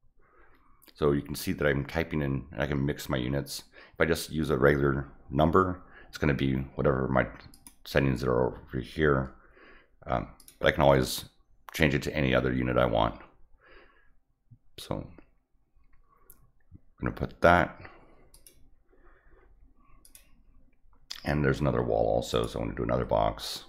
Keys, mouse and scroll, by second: 7.5 click, 10.4 click, 18.3 click, 20.0 click, 22.3 click.